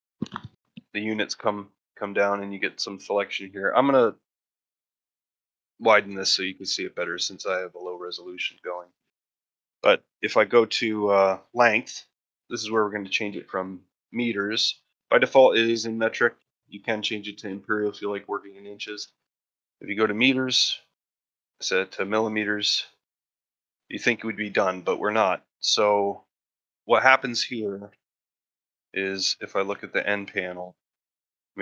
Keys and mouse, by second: 3.9-5.9 drag, 16.5-18.2 drag, 20.0-22.7 drag, 27.3-28.0 middle drag, 28.1 shift+middle drag.